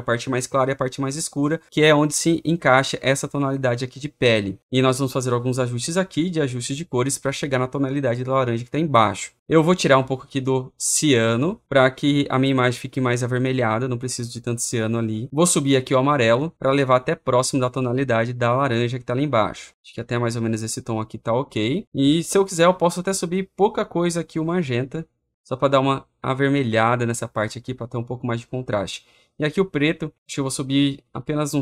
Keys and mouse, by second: 15.2 click, 21.8 click, 26.6-27.6 drag.